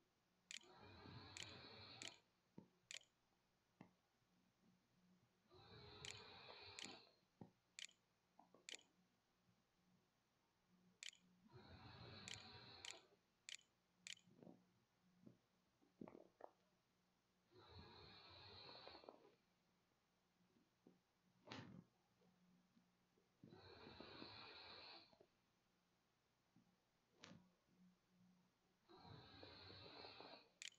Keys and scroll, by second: 0.3-13.6 typing, 28.7 Tab, 28.8-30.7 typing.